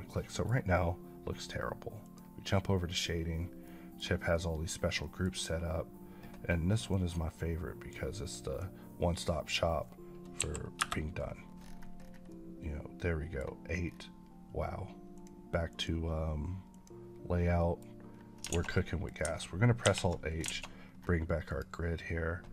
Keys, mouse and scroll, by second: 1.9 click, 3.6 middle click, 4.5 middle click, 5.2-6.8 scroll up 4, 6.8 click, 8.8 click, 10.3 KP_8, 10.7 KP_Enter, 11.5-11.9 scroll up 1, 12.2 middle click, 13.7-15.0 scroll down 1, 15.0 click, 15.6 click, 17.2 click, 17.5 middle click, 18.0-18.3 scroll down 1, 18.5 a, 18.6 middle click, 19.7 alt+h, 20.4 alt+a, 20.7 scroll up 2, 21.4 click.